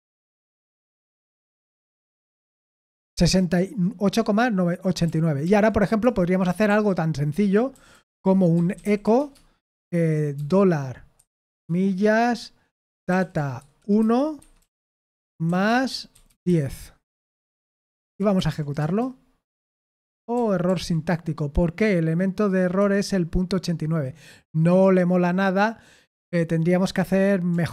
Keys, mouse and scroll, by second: 0.0-2.4 typing, 0.0 Escape, 5.1 ctrl+p, 5.5 ctrl+p, 6.0 Return, 6.7-11.4 typing, 12.6-18.2 typing, 18.4 ctrl+p, 18.8 Return, 20.4 ctrl+p, 20.7 ctrl+p, 22.8 Return, 26.1-27.7 typing.